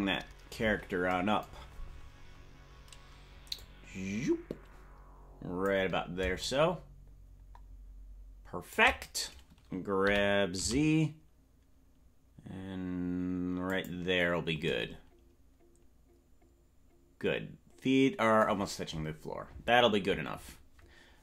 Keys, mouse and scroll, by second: 0.6-1.0 scroll down 4, 2.3-3.5 scroll down 1, 3.5-5.7 drag, 6.3-8.8 shift+drag, 10.0 g.